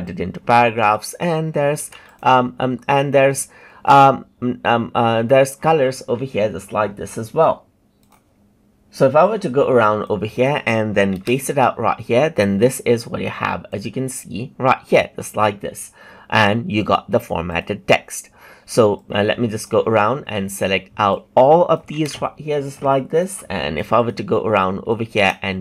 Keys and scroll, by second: 1.7 ctrl+c, 11.1 ctrl+v, 21.9 ctrl+c, 23.3 ctrl+c, 25.1 ctrl+v.